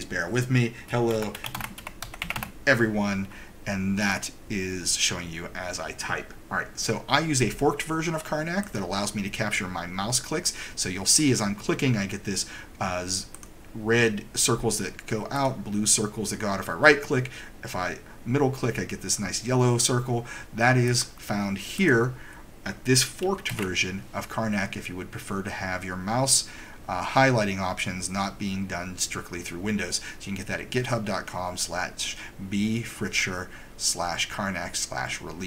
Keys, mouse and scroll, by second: 1.1-2.4 typing, 8.8 right click, 13.4 click, 15.4 middle click, 18.0-18.5 scroll down 1, 18.8-20.5 scroll down 1, 21.0 right click, 21.0-21.7 scroll, 21.9 right click, 23.5 super+=.